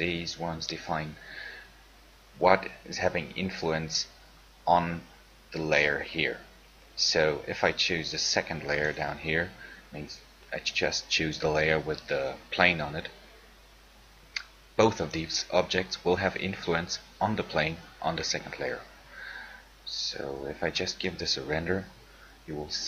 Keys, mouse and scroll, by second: 9.0 click, 20.9-22.8 middle drag.